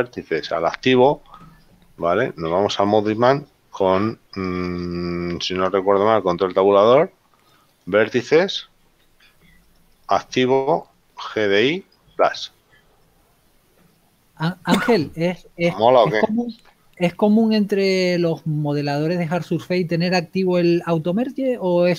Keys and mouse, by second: 7.4 ctrl+Tab, 8.1 click, 13.1 ctrl+click.